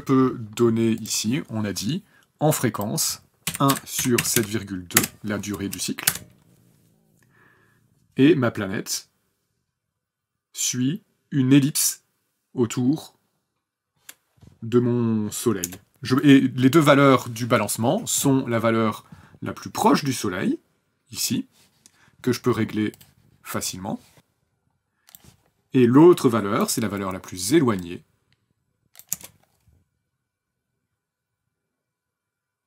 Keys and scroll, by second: 3.4 KP_1, 3.7 KP_Divide, 4.0 KP_7, 4.2 KP_Decimal, 4.3 KP_2, 4.9 KP_Enter, 6.0 KP_0, 15.6 KP_0, 29.1 KP_0.